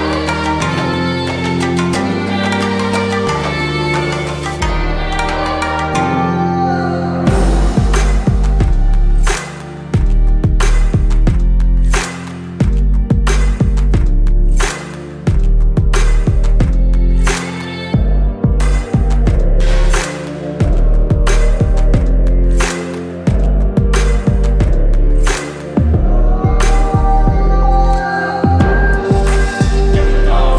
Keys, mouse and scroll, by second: 1.2 click, 5.2 click, 8.2 right click, 8.6 click, 11.2-13.9 drag, 21.2 click, 24.1 shift+o, 24.4 shift+n, 25.5 shift+e, 26.0 shift+y, 26.3 shift+space, 26.7 shift+d, 29.4 shift+l, 30.2 shift+f.